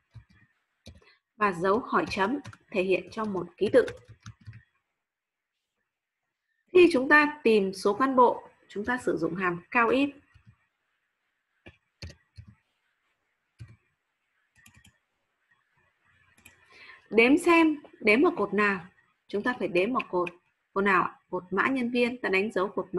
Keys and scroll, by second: 0.0-4.7 typing.